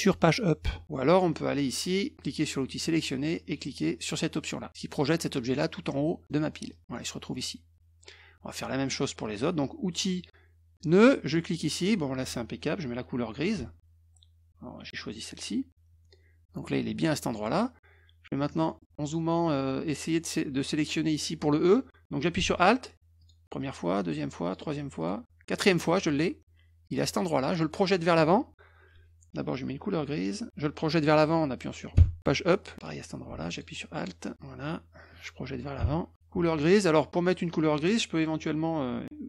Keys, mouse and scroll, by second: 2.7 click, 6.7 click, 9.2 click, 11.2 click, 15.0 click, 18.5 scroll up 2, 19.8 click, 23.2 alt+click, 23.9 alt+click, 24.4 alt+click, 25.0 alt+click, 32.7 click, 33.5 alt+click, 34.0 alt+click.